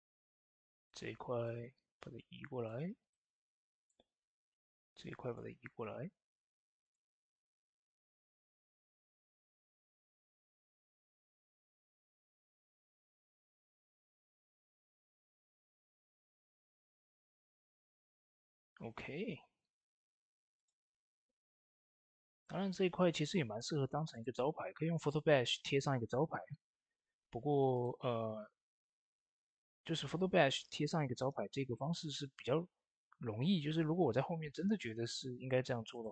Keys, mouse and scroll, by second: 7.5 Tab, 8.9-18.7 drag, 18.7 Tab, 20.4-26.0 drag, 27.1 click, 27.2 Tab, 27.6 click, 30.3 click, 30.4 shift+space, 31.1 ctrl+space, 35.7 shift+space, 35.8 click.